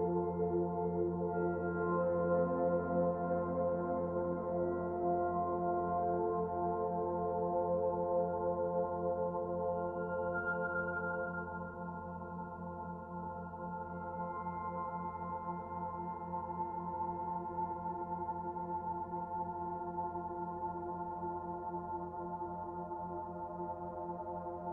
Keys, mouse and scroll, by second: 1.4 click, 2.0 click, 2.3 middle click, 3.0 click, 3.9 middle click, 5.0 middle click, 8.6 click, 9.6 middle click, 13.8 click, 14.3-14.6 scroll down 2, 14.6 shift+middle click, 15.0 click, 15.3 middle click, 16.0-16.7 scroll up 1, 16.7 scroll up 1, 16.8 shift+middle click, 18.7 click, 20.3 middle click, 20.3-21.2 scroll down 3, 21.2-22.1 scroll up 2, 22.1 click, 22.5 shift+click, 24.3 click.